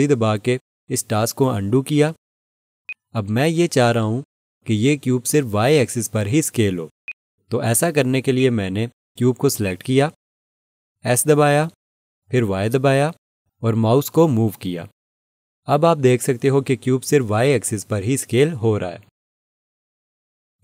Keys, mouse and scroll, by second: 1.9 ctrl+z, 2.9 click, 7.1 alt+click, 7.9 alt+click, 12.5 s, 12.8 y.